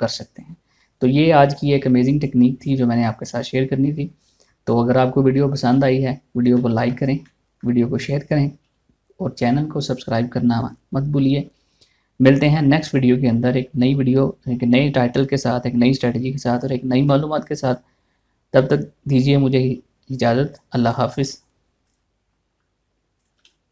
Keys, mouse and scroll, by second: 6.3 scroll down 1, 7.1-10.7 shift+middle drag, 22.4 click.